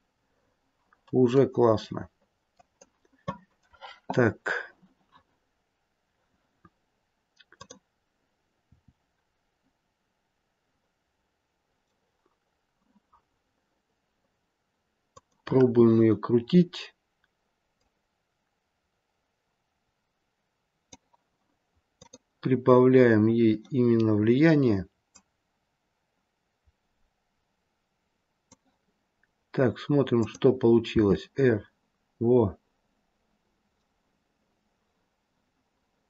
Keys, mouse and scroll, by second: 7.4 click, 8.6 r, 17.6 click, 21.9 click, 23.8-24.2 scroll down 5, 25.0 click, 25.0-26.9 scroll down 3, 30.1 click, 30.9 r.